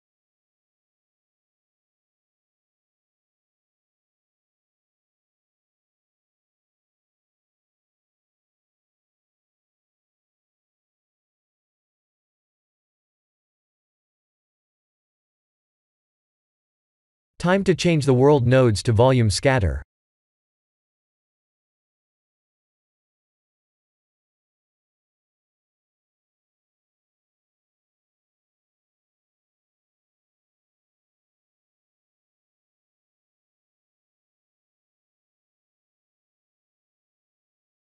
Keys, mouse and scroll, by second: 2.0 click, 5.3 click, 7.6 click, 9.6 middle click, 12.9 KP_0, 18.4 click, 20.5 shift+middle click, 21.3 click, 21.5 x, 22.0 click, 22.1 x, 22.5 shift+a, 26.2 click, 28.8-29.8 scroll up 11, 28.8 middle click, 29.9 shift+middle click, 30.9 click, 35.3 click.